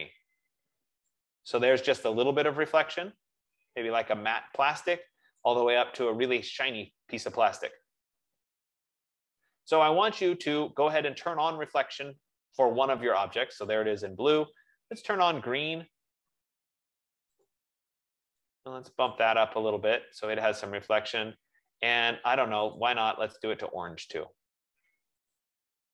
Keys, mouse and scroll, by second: 1.9 click, 6.1 click, 15.3 click, 17.7 click, 19.4 click, 23.0 click, 25.7 click.